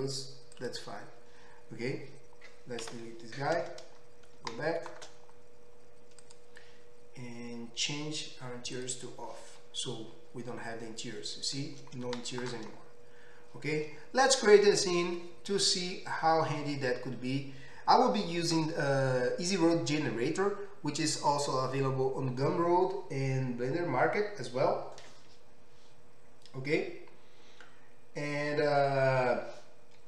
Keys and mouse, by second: 0.8-6.2 middle drag, 3.0 Delete, 6.2 click, 6.5-8.7 middle drag, 8.7-30.0 drag.